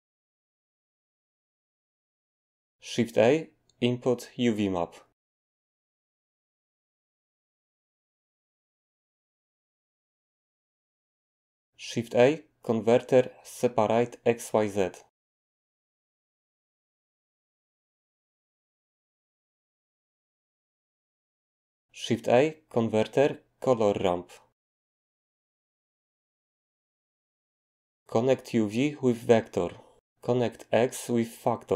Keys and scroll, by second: 2.8 a, 12.0 a, 22.1 a.